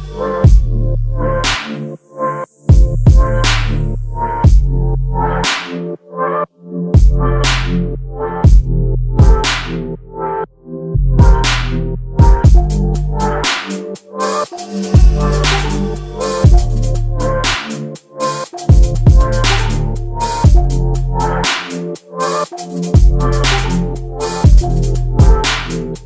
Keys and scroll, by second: 1.9 space, 14.9 Delete, 16.4 space, 17.9 m, 22.3 /, 22.7 5, 22.9 Return, 24.9 space.